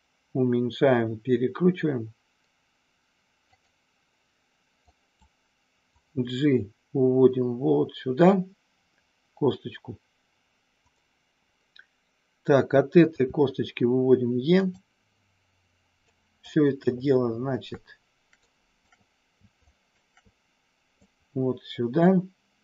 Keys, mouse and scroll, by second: 3.6 click, 4.9 click, 5.9-10.7 drag, 13.2 e, 14.5 click, 16.1 click, 18.3 shift+click, 19.5 shift+click, 21.1-22.6 drag.